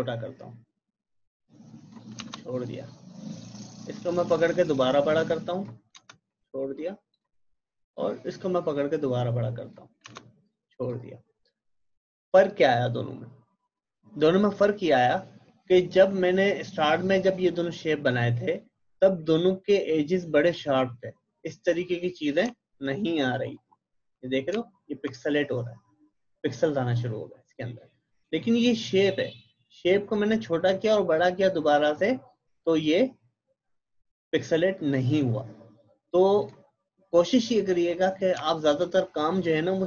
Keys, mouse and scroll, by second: 22.5 alt+Num_Lock, 22.6 alt+scroll up 1, 24.6 alt+scroll down 1, 28.5 click, 36.4 click, 38.5 alt+scroll down 1.